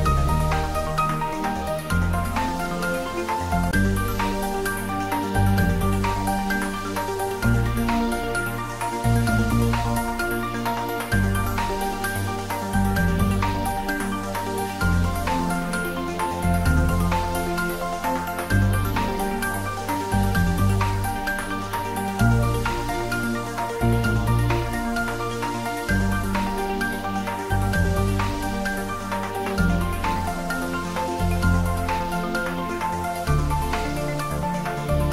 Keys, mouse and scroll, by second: 2.2 click, 8.7-11.0 drag, 11.5 Tab, 11.8-13.1 scroll down 1, 13.5-14.1 middle drag, 17.9 click, 24.1-25.6 scroll up 1, 25.6 click, 26.6-27.1 scroll up 1, 27.1 Tab, 27.6 click, 32.8 alt+shift+click, 35.0 click.